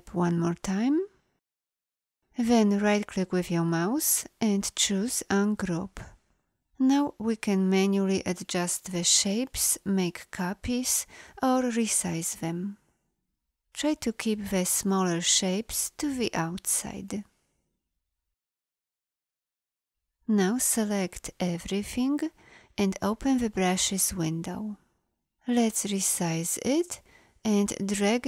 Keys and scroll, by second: 6.9 v.